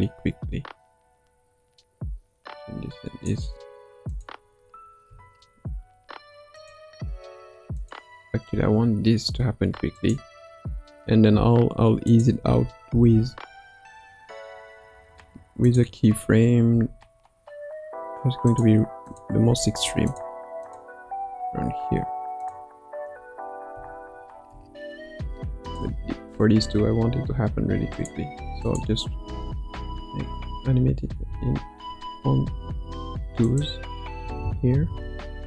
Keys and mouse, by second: 4.1 click, 5.0 a, 6.5 click, 7.7 click, 8.5 g, 12.0 click, 12.5 space, 13.3 space, 15.7 click, 16.7 r, 19.0 click, 19.5 r, 21.0 r, 23.7 a, 24.5 i, 25.7 click, 26.5 g, 28.6 click, 29.6 Right, 29.9 Right, 30.4 Right, 31.1 Left, 32.3 g, 34.2 Left, 34.4 Left, 34.7 Left, 35.0 Right, 35.2 Right, 35.3 Right.